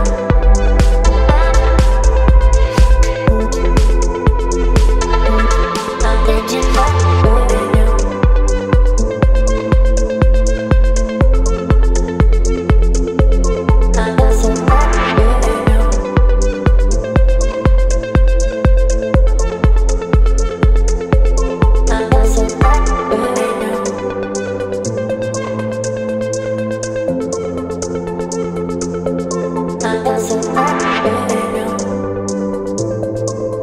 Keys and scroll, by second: 9.6 space, 25.9 space, 31.4 space.